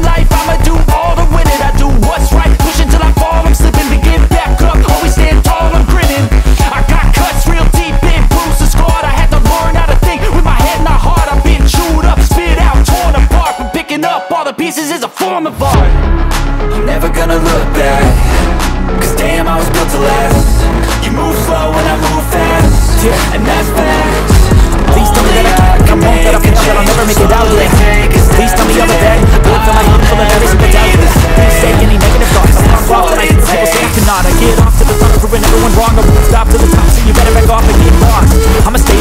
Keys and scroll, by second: 1.1 Return, 1.1-2.2 typing, 2.5 ctrl+space, 5.5 k, 6.9 k, 10.1 F2, 13.3 Down, 14.7 Up, 15.6 Return, 16.7 ctrl+k, 30.1 ctrl+k, 30.6 Escape, 31.0 F2.